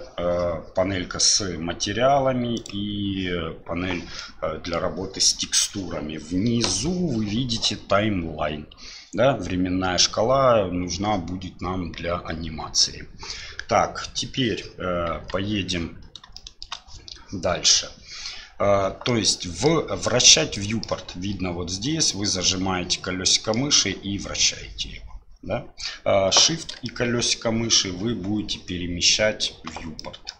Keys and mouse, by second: 2.5 click, 4.2 middle click, 15.1 KP_1, 16.3 shift+middle click, 19.1 middle click, 20.5 middle click, 22.2-23.5 middle drag, 23.7-26.4 middle drag, 26.8-29.4 shift+drag, 30.0 click.